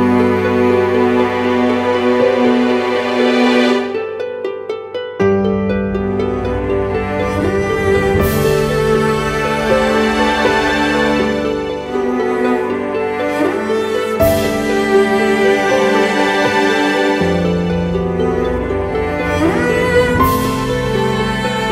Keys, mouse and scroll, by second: 10.2 Return.